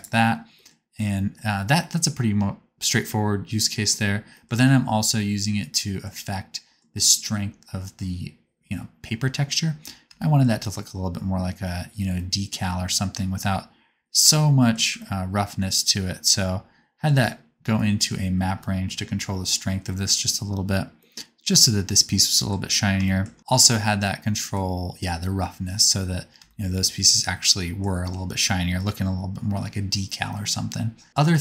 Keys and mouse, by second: 15.1-20.8 ctrl+middle drag, 23.3-26.0 middle drag.